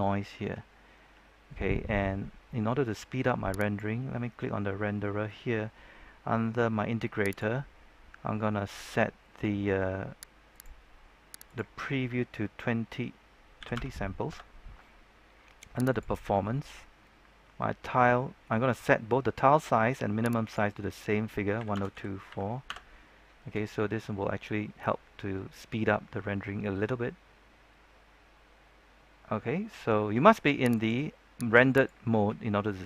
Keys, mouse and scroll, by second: 3.5 Return, 3.5-4.5 drag, 7.7-10.4 scroll down 1, 10.4 click, 13.5 KP_2, 13.7 KP_0, 15.0 KP_Enter, 15.0-15.9 scroll down 1, 15.9 click, 16.2-17.9 scroll down 1, 20.7 click, 21.5 KP_1, 21.7 KP_0, 21.9 KP_2, 22.2 KP_4, 22.6 KP_Enter, 26.2-27.0 scroll down 1, 28.1-29.0 scroll up 1, 30.7 click.